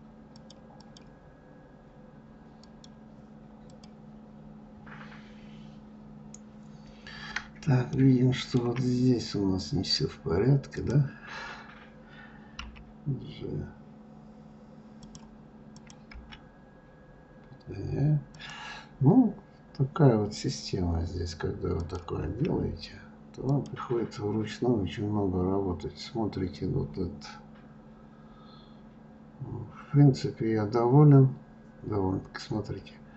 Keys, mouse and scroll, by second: 3.1 click, 4.1 click, 5.3 scroll down 1, 6.1-7.6 scroll up 2, 7.6-8.3 scroll up 1, 8.3-9.4 shift+middle drag, 9.4 scroll up 2, 11.2 click, 16.2 click, 16.6 g, 22.2 click, 22.6 g, 25.3 middle click, 25.3-26.5 scroll down 3, 26.5 scroll down 2, 28.2-29.6 scroll down 1, 31.3-32.2 scroll up 4.